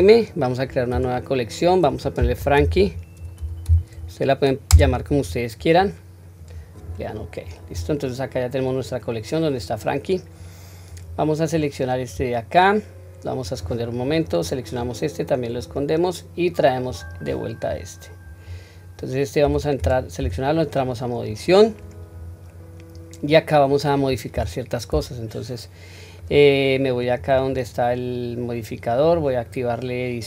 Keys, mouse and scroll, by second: 10.8 click, 12.0-13.3 scroll down 1, 13.3 click, 13.3 scroll down 1, 14.1 click, 15.5 click, 16.8 click, 17.6-18.1 scroll up 1, 19.3 Tab, 19.3-19.7 scroll up 3, 19.7 click, 20.1 Tab, 20.8-21.2 scroll down 1, 21.3-22.4 scroll up 1, 22.4-22.8 scroll up 1, 22.8-23.1 scroll down 1, 24.2 3, 24.8-26.1 middle drag, 27.1 click, 28.9 click.